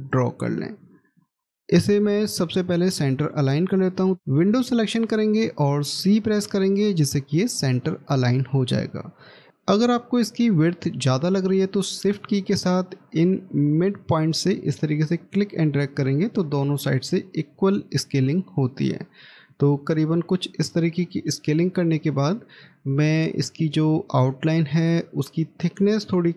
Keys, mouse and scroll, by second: 5.9 c, 9.3 scroll up 1, 13.6 shift+click, 21.0 middle click.